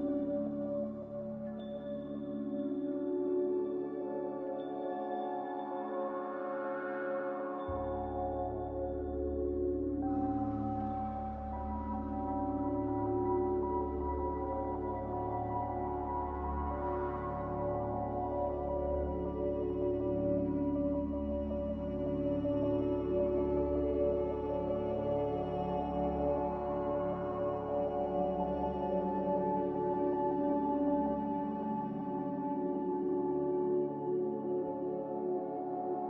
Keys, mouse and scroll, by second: 0.3 q, 10.8 ctrl+z, 22.9 z, 27.0-28.0 typing, 30.1 typing, 31.4-32.1 typing.